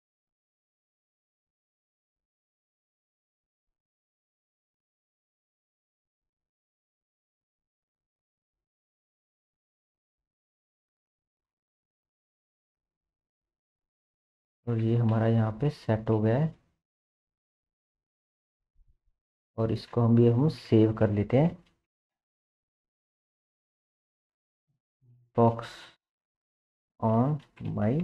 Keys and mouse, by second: 2.3 r, 4.0 KP_3, 7.2 r, 9.6 shift+middle click, 11.0 KP_1, 11.6-16.6 shift+middle drag, 14.7 KP_0, 18.3-21.6 shift+drag, 21.6 ctrl+s, 21.7-28.0 drag.